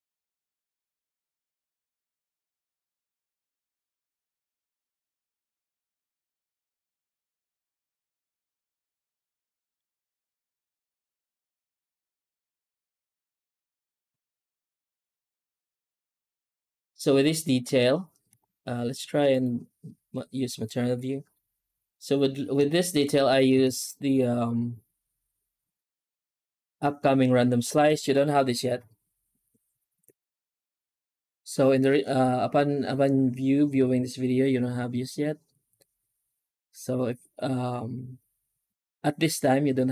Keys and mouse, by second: 0.0 ctrl+space, 0.4 z, 3.2 middle click, 9.2 middle click, 10.1 z, 12.3 middle click, 13.2 middle click, 14.0 ctrl+shift+click, 15.8 z, 18.2 z, 22.5 shift+middle click, 23.5 shift+q.